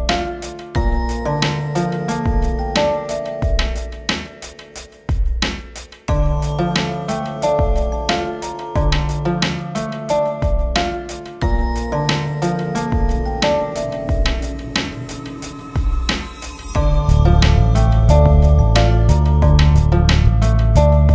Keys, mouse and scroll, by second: 2.0 click, 3.3 c, 3.6 click, 5.3 c, 5.4 click, 6.2 g, 6.5 click, 10.2-13.0 drag, 15.2-18.1 drag, 18.1 ctrl+space, 18.5 click, 20.6 shift+click.